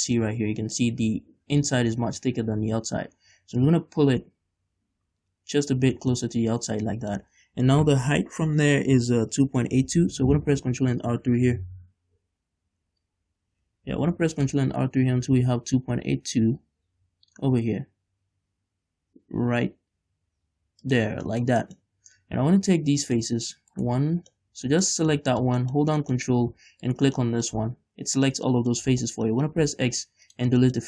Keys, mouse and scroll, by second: 0.1 middle click, 0.4-0.7 scroll up 1, 1.1 middle click, 3.7-6.3 drag, 6.3-10.3 middle drag, 14.0 ctrl+r, 21.1 shift+click, 21.4-23.2 shift+middle drag, 23.2 click, 23.8 right click, 24.5-27.0 middle drag, 26.3-27.0 scroll up 2, 27.0 ctrl+right click, 27.3 middle click, 27.7 z, 28.6 middle click, 29.0 z, 29.4 middle click, 29.7 x, 30.7 shift+middle click.